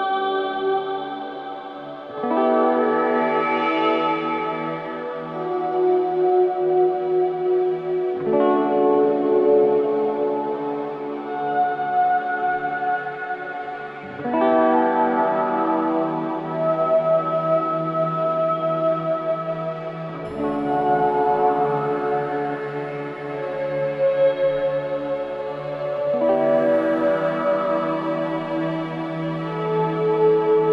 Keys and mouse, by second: 0.0-0.3 typing, 1.6 shift+click, 2.8 click, 3.9-4.2 typing, 5.4 click, 6.0 typing, 7.9-11.7 typing, 10.3 click, 11.8 click, 13.6-13.9 typing, 14.4 click, 15.0-15.4 typing, 16.5-18.7 drag, 18.7-21.2 typing, 23.3 Escape, 26.7 click, 27.6-28.7 typing, 30.0 click.